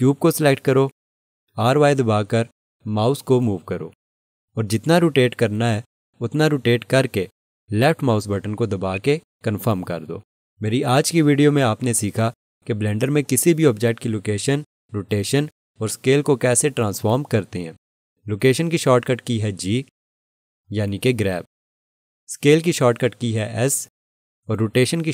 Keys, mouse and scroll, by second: 8.9 click.